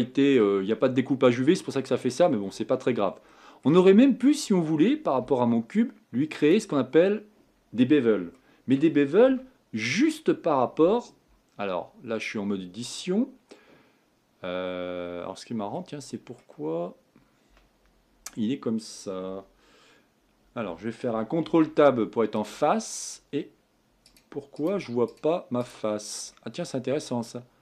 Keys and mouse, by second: 0.0-1.8 middle drag, 2.2 middle click, 6.6 click, 9.3 Tab, 21.4 ctrl+Tab, 24.0-24.7 drag.